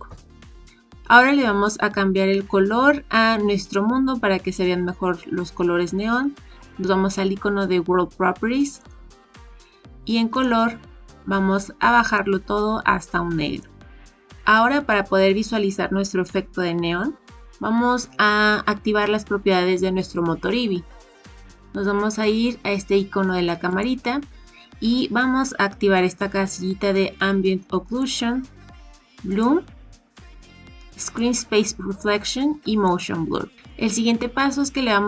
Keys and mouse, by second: 8.8 click, 23.7 click, 27.8 click, 29.2 click, 31.0 click, 32.8 click.